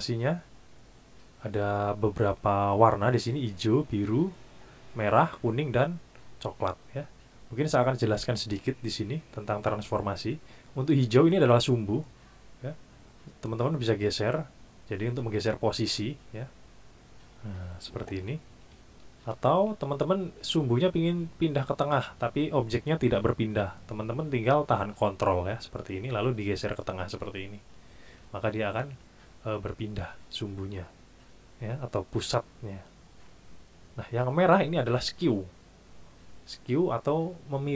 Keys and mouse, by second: 13.8 click, 19.3 ctrl+z, 25.9-27.8 ctrl+drag.